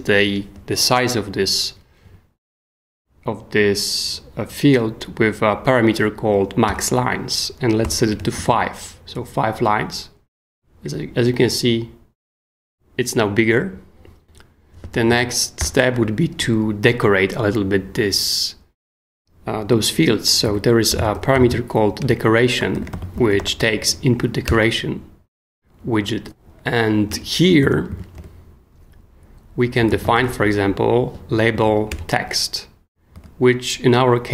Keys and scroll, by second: 2.0 Down, 6.7 Return, 7.8 5, 8.3 super+s, 15.2 super+Escape, 15.6 o, 20.2-24.1 typing, 22.0 Return, 24.5 Return, 27.1 Return, 27.6 super+Return, 27.7 super+Escape, 27.9 k, 28.2 shift+o, 29.6-30.6 typing, 31.5 Down, 31.9 Return, 33.1 '.